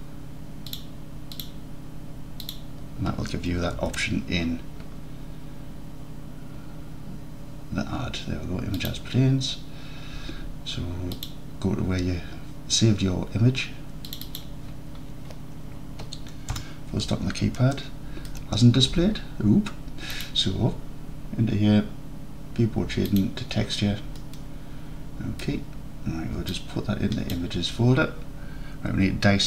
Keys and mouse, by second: 3.8 shift+a, 16.6 KP_Decimal, 17.8-18.4 alt+drag, 20.2-23.8 drag, 24.3 alt+click, 25.2 alt+click, 25.4 alt+click, 26.6-27.4 drag.